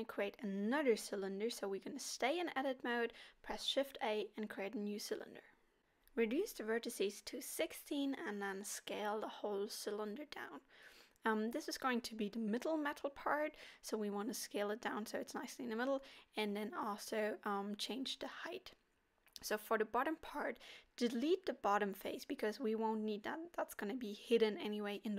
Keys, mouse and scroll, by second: 0.2 shift+a, 7.2-7.6 scroll down 4, 7.5 middle click, 10.1 s, 13.2 middle click, 14.2 s, 16.6 middle click, 17.0-17.4 scroll up 3, 17.4 click, 18.3 x, 20.1 middle click, 21.5 l, 22.0 scroll up 2, 23.8 g, 25.0 middle click.